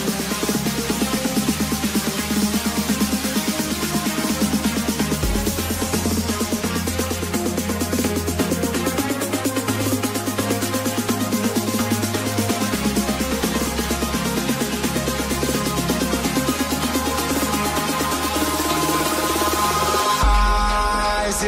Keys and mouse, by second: 0.7 click, 2.7 click, 3.7 click, 8.5 KP_1, 8.9 KP_Decimal, 8.9 KP_1, 8.9 KP_5, 9.2 Return, 10.9 Return, 10.9 KP_5, 11.4 click, 12.4 Return, 12.4 click, 12.4 KP_0, 13.5 click, 13.7 Return, 13.7 KP_0, 15.5 Return, 15.5 click, 17.0 Return, 17.0 click, 17.7 KP_1, 17.9 KP_Decimal, 18.1 KP_3, 18.3 Return, 20.2 click.